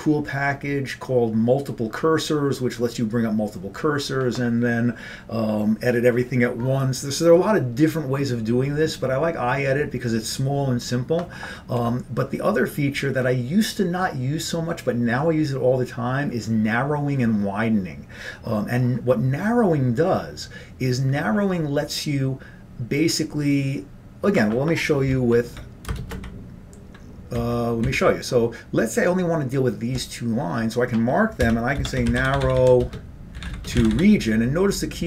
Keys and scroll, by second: 25.3 ctrl+p, 25.6 ctrl+f, 26.1 ctrl+shift+space, 26.3 ctrl+n, 27.5 ctrl+n, 27.9 ctrl+n, 31.5 Escape, 32.1-34.5 typing.